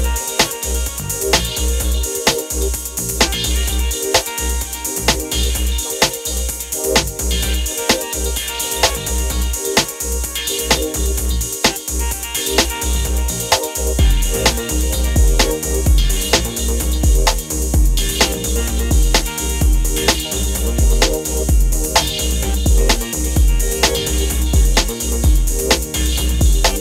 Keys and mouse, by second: 0.1 click, 0.8-2.2 drag, 3.8-5.0 drag, 6.7 click, 7.5 click, 7.7 click, 8.5-9.6 middle drag, 9.8 middle click, 12.9-15.3 drag, 22.0-26.1 drag.